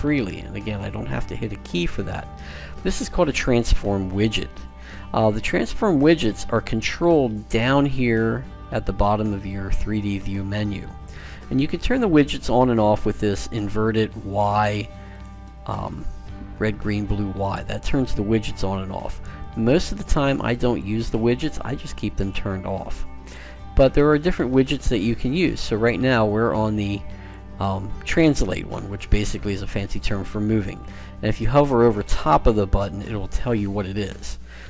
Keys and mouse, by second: 15.0 click, 17.3 click, 20.6 click, 25.2-26.6 right drag, 26.6 middle click, 26.8 click, 26.8 right click.